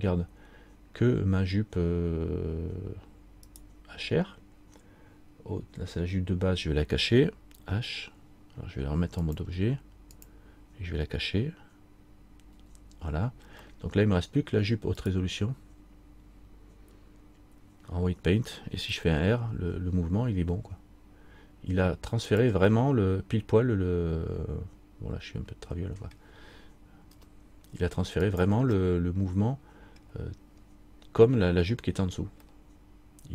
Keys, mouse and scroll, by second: 3.7 right click, 9.4 click, 12.7 h, 13.8 middle click, 15.2 right click, 27.3-28.4 scroll down 1, 27.3 r, 28.9 scroll up 1, 29.0 middle click, 30.1 scroll down 1, 30.8-31.1 scroll up 2, 32.6-33.3 scroll up 2.